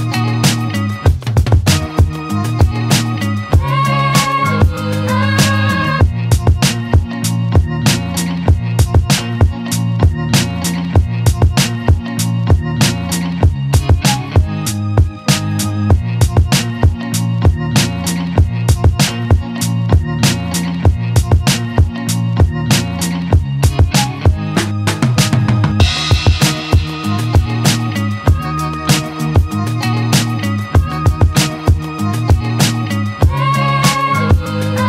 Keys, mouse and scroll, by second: 1.0 z, 1.4 ctrl+click, 2.2 ctrl+click, 2.9 right click, 4.0-5.5 drag, 5.6 Tab, 6.3 alt+right click, 6.5-8.1 alt+drag, 8.1-8.5 alt+right drag, 8.5 alt+click, 8.9-9.3 alt+right drag, 9.3-10.5 alt+drag, 10.5 Tab, 12.0 `, 12.7-13.0 scroll up 2, 13.0 alt+middle click, 13.5-14.0 scroll up 1, 14.0 ctrl+click, 14.8 click, 18.9 Tab, 19.1 alt+right click, 19.4 alt+click, 19.7 alt+right click, 20.2 alt+drag, 20.4 alt+right drag, 20.7 z, 20.9 click, 21.1-22.6 alt+drag, 26.2 alt+right click, 26.4 alt+click, 27.2 ctrl+s, 28.2 alt+right click, 28.3 alt+click, 28.4 alt+right click, 28.7 click, 29.7 click, 30.1 click, 30.3 click, 30.4 alt+right drag, 30.7 Escape, 30.9 `, 31.2 alt+right click, 31.4 alt+middle click, 31.6 shift+a, 32.5 scroll up 1, 32.7 alt+middle click, 32.9 scroll down 1, 33.2 alt+middle click, 33.5 g.